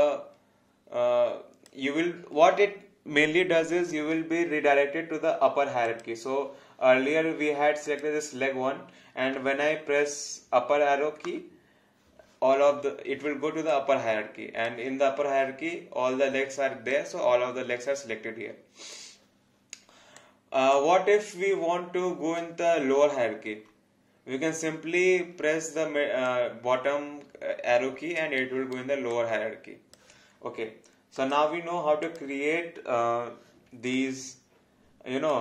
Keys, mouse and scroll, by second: 3.9-5.7 scroll up 1, 5.9 click, 13.7 alt+click, 16.9 click, 20.2 click, 26.2 alt+click, 28.4 alt+right click, 29.1 alt+click, 34.0 alt+click.